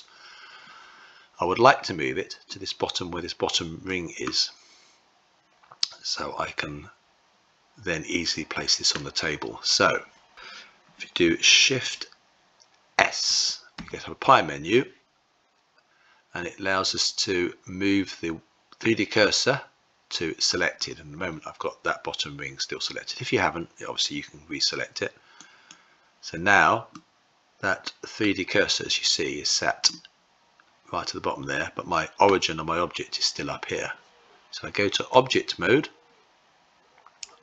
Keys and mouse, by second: 3.4-8.5 middle drag, 13.3 shift+s, 26.6-27.8 middle drag, 29.4-31.8 middle drag, 34.7 Tab, 37.3-37.4 drag.